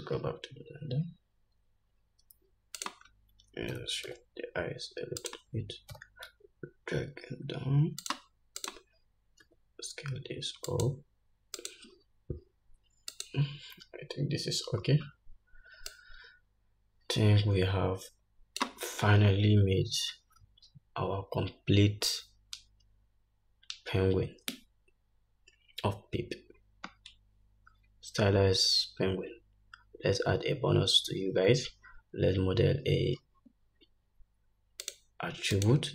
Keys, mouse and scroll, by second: 1.7-2.9 scroll up 1, 3.2 click, 4.1 g, 6.3 g, 8.9 click, 9.8 s, 11.9 click, 13.5 click, 14.2-14.9 scroll down 1, 14.9-15.7 scroll down 1, 16.3-35.9 drag.